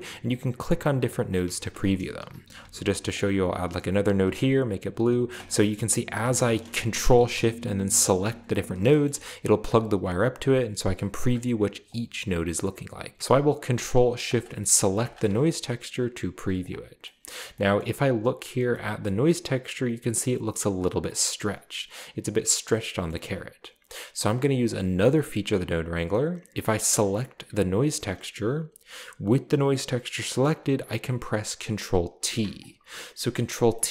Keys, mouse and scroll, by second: 0.9 ctrl+shift+click, 1.3 ctrl+shift+drag, 1.7-2.7 typing, 3.2-4.5 drag, 4.6 click, 5.4 ctrl+shift+click, 5.4 typing, 6.3 click, 8.3 ctrl+shift+click, 8.9 middle click, 9.7 click, 11.2 click, 11.2 typing, 11.9 ctrl+shift+click, 12.6 ctrl+shift+click, 14.3 ctrl+shift+click, 15.0 ctrl+shift+drag, 15.5 click, 16.5 click, 17.1-17.4 middle drag, 17.8-18.4 shift+middle drag, 18.0-18.7 scroll up 1, 19.1-19.6 shift+middle drag, 23.1 middle click, 27.3 click, 32.2 ctrl+t, 33.4 middle click.